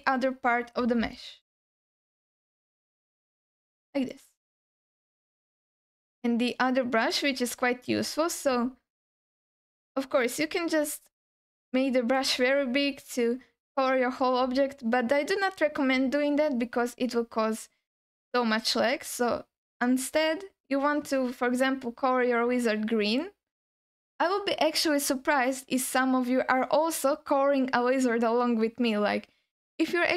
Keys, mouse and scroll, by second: 0.4 alt+shift+middle click, 2.0 scroll up 1, 2.2 alt+shift+middle click, 2.8 shift+click, 3.6 shift+click, 4.4 click, 7.0 click, 9.2 click, 9.6-10.3 scroll down 4, 10.8 f, 12.2 f, 12.3 f, 13.3 f, 16.8-18.3 scroll up 4, 18.8 click, 23.1 click.